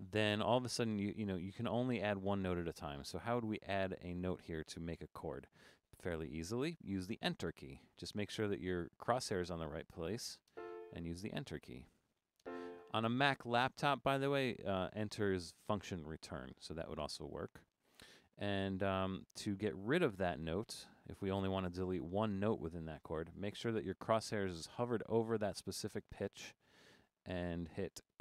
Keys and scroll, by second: 3.1 Down, 4.4 Down, 4.7 Down, 4.9 Up, 5.1 Up, 8.2 Up, 8.5 Down, 11.5 Down, 11.7 Down, 12.1 Down, 19.7 Down, 20.1 Down, 20.7 Up, 21.4 Up, 21.8 Up, 22.4 Up, 22.9 Down, 23.1 Down, 23.4 Down, 23.9 Up.